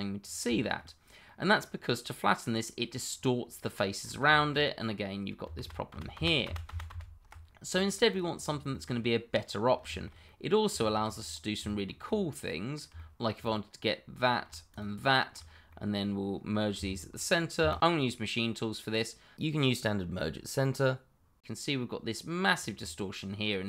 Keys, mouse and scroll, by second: 0.2-0.6 scroll down 1, 0.6 shift+middle click, 1.2 middle click, 4.0 scroll up 1, 4.3 shift+middle click, 4.8-5.4 scroll up 1, 5.5 ctrl+z, 7.4 ctrl+scroll down 1, 7.7 middle click, 8.1 click, 8.3-8.7 scroll down 1, 8.7 middle click, 9.9 shift+middle click, 9.9 middle click, 11.2-11.6 scroll down 1, 11.6 shift+middle click, 11.8 middle click, 12.3 middle click, 14.3 click, 14.7 shift+click, 14.7 click, 15.2 middle click, 15.4 scroll up 1, 15.7 middle click, 17.6 shift+1, 18.9 middle click, 20.0-20.3 scroll down 1, 20.8 middle click, 22.5 scroll up 1, 22.8 middle click.